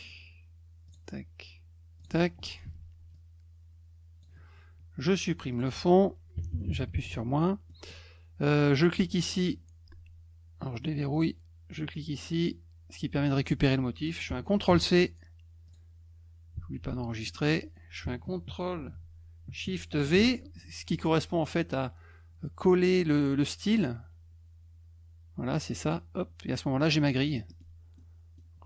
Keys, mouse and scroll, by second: 0.9 click, 2.0 click, 3.1-4.2 drag, 5.5 click, 7.7 middle click, 8.7 click, 9.3 click, 11.1 click, 12.4 click, 15.7 click, 17.1 middle click, 17.3 scroll up 2, 20.9 click, 25.8 click, 27.2 middle click, 27.5 middle click, 27.9 middle click.